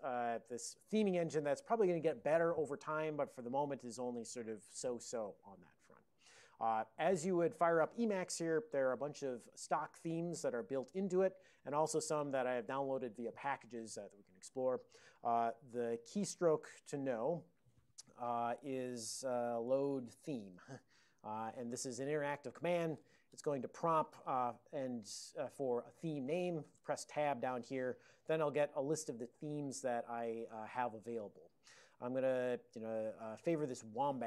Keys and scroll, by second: 19.1-20.9 typing, 26.8 Tab.